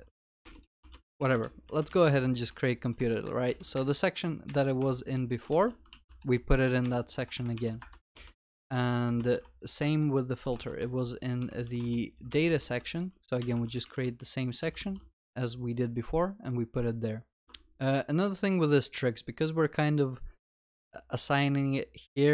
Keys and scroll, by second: 1.9 alt+shift+Down, 4.8 alt+shift+Down, 5.5 Tab, 5.9 ctrl+alt+l, 6.0 ctrl+s, 12.7 alt+shift+Up, 14.8 Tab, 17.4 ctrl+Tab.